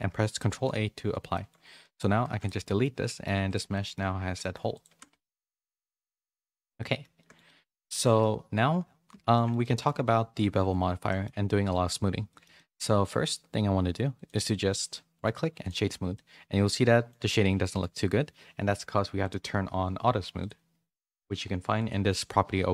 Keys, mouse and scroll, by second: 0.5 ctrl+a, 1.3 shift+middle click, 1.9 click, 2.3 x, 2.8 middle click, 3.7 middle click, 4.0 Tab, 4.2 3, 4.3 middle click, 4.8 g, 6.2 Tab, 6.4 a, 6.6 a, 6.7 middle click, 7.1 shift+middle click, 7.4 middle click, 8.0 shift+middle click, 9.3 middle click, 9.6 middle click, 11.0 middle click, 12.3 shift+middle click, 12.5 middle click, 15.2 right click, 16.1 middle click, 16.8 middle click, 17.3 middle click, 20.4 click.